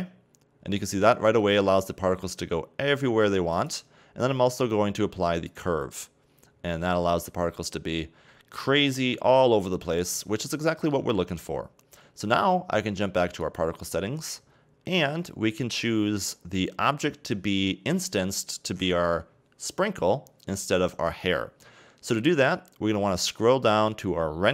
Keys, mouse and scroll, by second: 1.1 scroll down 2, 1.3-3.5 middle drag, 3.5 click, 5.5 click, 6.8-8.5 middle drag, 8.5 scroll down 2, 8.7-9.6 middle drag, 9.6-10.6 scroll up 2, 10.6-13.4 shift+middle drag, 13.4 click, 16.5-19.5 scroll down 2, 22.6-23.2 scroll down 1, 23.2-24.4 scroll down 1.